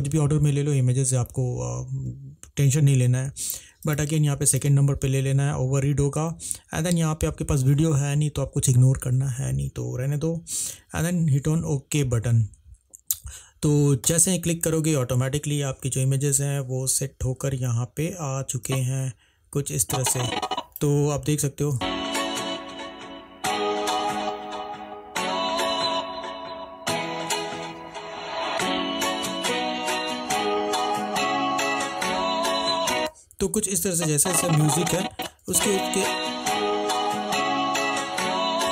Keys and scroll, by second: 21.9 space, 33.1 space, 35.6 space.